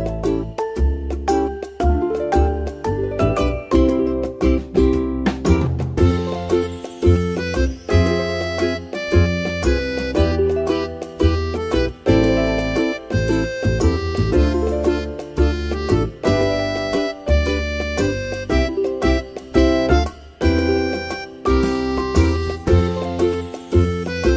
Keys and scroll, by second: 3.0 ctrl+x, 3.4 ctrl+v, 4.9 Tab.